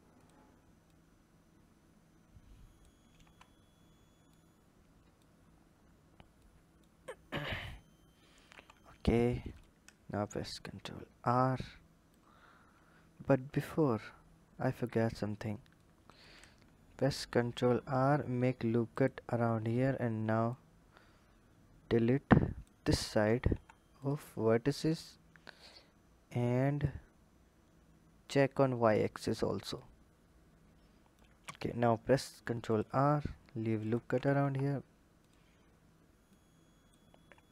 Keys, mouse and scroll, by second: 0.7 click, 3.1 Tab, 4.1 click, 5.2-6.1 scroll down 1, 6.2 click, 7.4 click, 8.3 Tab, 9.3 click, 10.2 ctrl+r, 13.2 KP_7, 14.6 click, 15.6-17.0 drag, 17.0 ctrl+r, 20.3 click, 23.3 Delete, 24.8 click, 25.5 click, 28.1 click, 29.5 click, 31.8 ctrl+r, 34.3 KP_1, 35.0 click, 36.1 click.